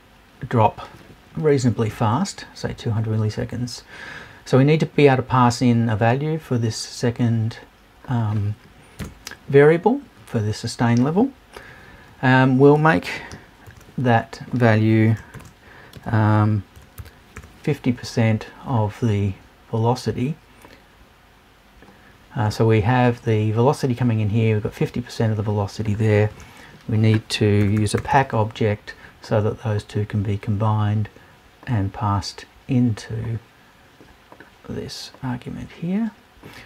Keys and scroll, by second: 9.0 BackSpace.